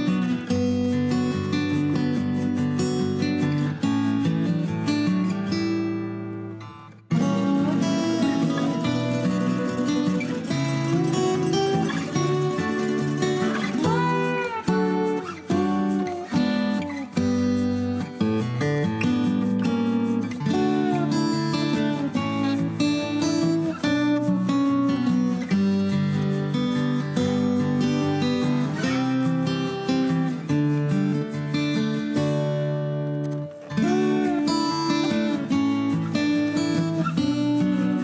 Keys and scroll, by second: 3.4 m, 4.6-5.7 typing, 7.3 p, 12.2 Escape, 14.8 l, 18.4 Escape, 19.0 f, 20.9-22.5 typing, 22.6 Return, 22.8 Escape, 23.8-26.0 typing, 25.7 Escape, 28.9 Escape, 37.9 l.